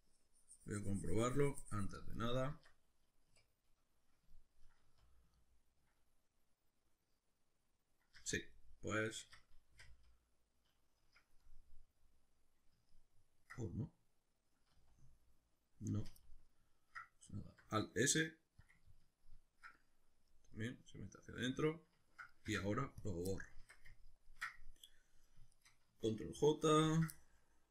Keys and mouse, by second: 2.2 right click, 2.5 Tab, 3.3 \, 3.7-8.2 middle drag, 4.8 z, 8.2 z, 9.2 Tab, 9.8 x, 11.2 Escape, 11.8-18.7 middle drag, 14.7 z, 15.9 z, 17.5 alt+s, 18.7 click, 20.9-25.6 middle drag, 22.5 x, 23.6 Tab, 25.6 shift+right click, 26.9 ctrl+j, 27.2-27.7 middle drag.